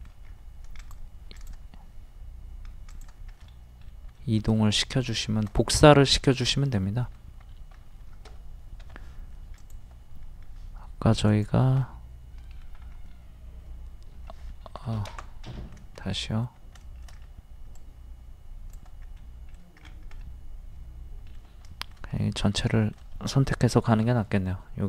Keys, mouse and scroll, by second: 0.3-0.6 scroll up 1, 0.8 shift+click, 2.9 shift+click, 3.4 shift+middle click, 4.2 shift+middle click, 6.1-6.8 scroll down 2, 6.8-8.1 middle drag, 8.8 m, 9.5 ctrl+click, 11.3 click, 11.8-14.6 middle drag, 14.7 ctrl+z, 15.5 middle click, 17.1 scroll down 1, 17.7-19.0 drag, 19.2 middle click, 20.2 middle click, 22.2 middle click, 22.7 shift+middle click, 23.9 m.